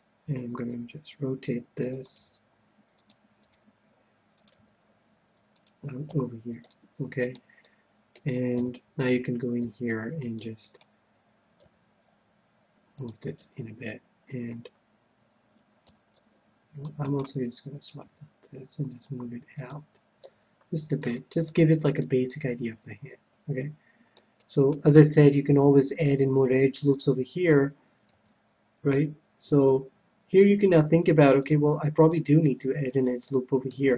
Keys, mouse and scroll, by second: 1.0 r, 2.0-7.2 drag, 2.1 g, 3.4 r, 4.5 g, 6.2 a, 6.7-9.1 middle drag, 8.4 KP_7, 9.2 middle click, 9.5 c, 10.7-12.5 right drag, 11.6 g, 13.0-14.7 drag, 13.3 a, 15.8 c, 17.1-18.9 right drag, 18.0 g, 19.7-21.2 drag, 20.2 a, 21.0-23.8 middle drag, 24.3-26.7 middle drag, 26.8-27.8 scroll down 1, 27.8-28.6 scroll down 1, 28.1 ctrl+r, 32.2-33.8 right drag, 32.8-33.9 middle drag.